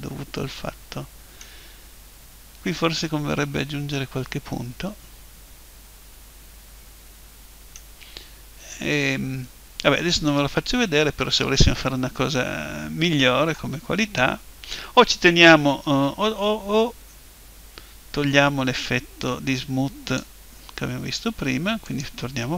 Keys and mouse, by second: 1.7-5.3 middle drag, 8.3-9.4 middle drag, 9.4 click, 9.5-13.3 middle drag, 18.8 click, 21.9 click.